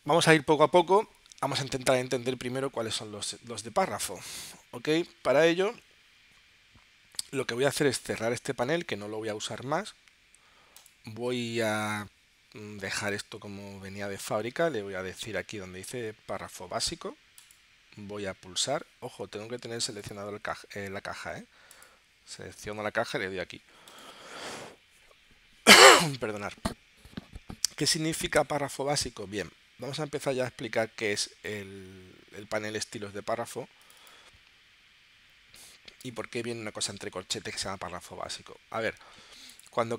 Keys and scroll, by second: 19.7 super+z.